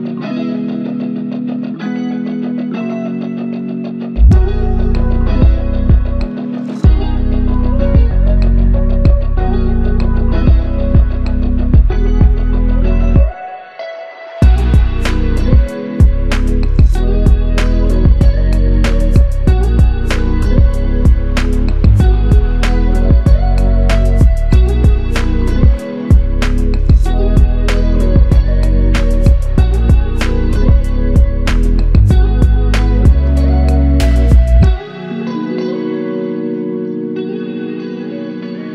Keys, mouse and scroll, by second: 0.7 ctrl+alt+click, 4.5 alt+click, 6.3 alt+click, 10.6 alt+click, 12.0 ctrl+click, 19.5 alt+click, 20.5 ctrl+click, 29.9 shift+click, 36.2 alt+click, 37.4 alt+click, 37.7 ctrl+alt+click.